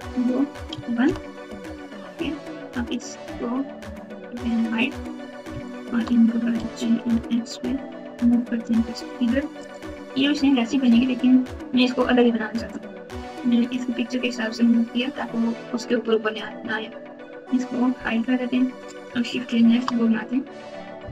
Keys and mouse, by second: 3.2 click, 4.4 click, 5.6 shift+click, 6.6 g, 15.0 click, 17.9 h, 19.5 shift+a.